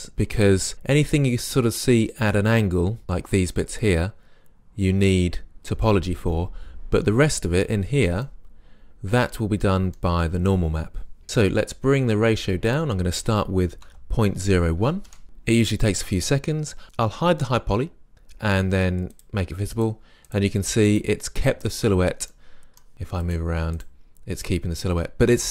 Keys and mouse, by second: 0.9 middle click, 8.2-8.7 middle drag, 11.2-12.7 middle drag, 12.7-16.4 drag, 18.1 click, 22.4-25.5 middle drag.